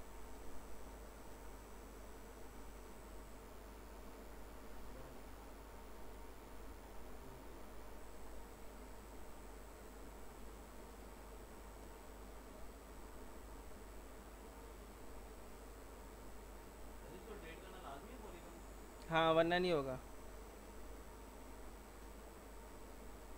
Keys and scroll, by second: 12.5 Delete.